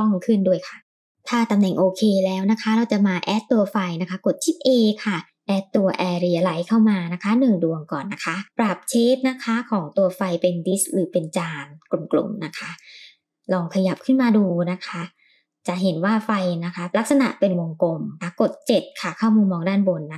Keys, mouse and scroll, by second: 1.1 click, 1.1 scroll up 3, 2.0 middle drag, 2.5 shift+middle drag, 3.2 shift+a, 8.4 click, 10.1-12.5 drag, 13.2-13.6 scroll up 3, 13.9-14.3 shift+middle drag, 15.6 g, 18.9 KP_7, 20.0 g.